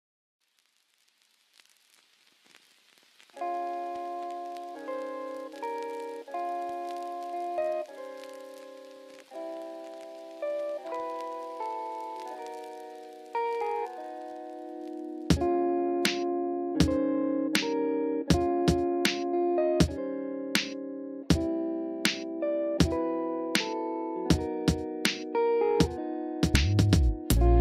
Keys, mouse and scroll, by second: 0.3 ctrl+z, 1.0 ctrl+z, 1.4-3.0 drag, 3.4 middle drag, 4.0 shift+middle drag, 4.8 shift+middle drag, 7.5 click, 7.9 click, 10.3 Tab, 12.3 f, 12.3 click, 13.4 click, 14.6 i, 17.8 Tab, 18.1 middle click, 18.5 shift+middle click, 19.3 s, 19.7 y, 21.5 shift+click, 21.9 middle click, 22.5 Tab, 22.8 shift+middle click, 23.9 shift+middle click, 24.3 middle click, 24.7 shift+middle click, 27.4 middle click.